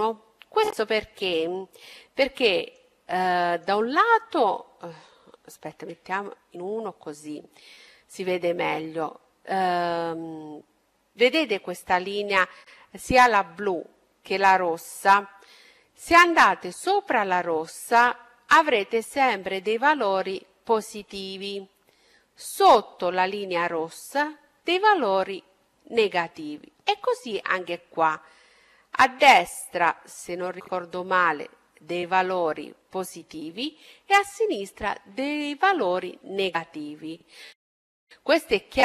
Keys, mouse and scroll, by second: 4.4 KP_1, 4.9 middle click, 5.6-7.7 middle drag, 14.6 middle click, 15.2-16.5 scroll up 1, 36.6-38.6 middle drag.